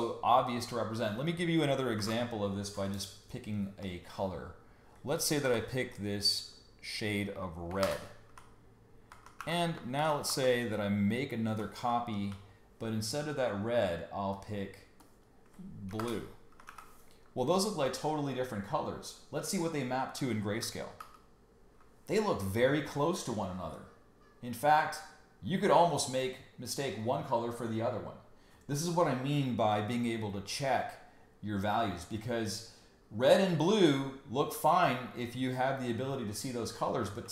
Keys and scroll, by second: 1.9 alt+shift+super+n, 5.4 m, 7.8 alt+BackSpace, 9.4 super+d, 10.0 super+j, 10.2 v, 15.9 alt+BackSpace, 16.7 super+d, 21.0 super+y, 34.7 super+y, 37.2 super+y.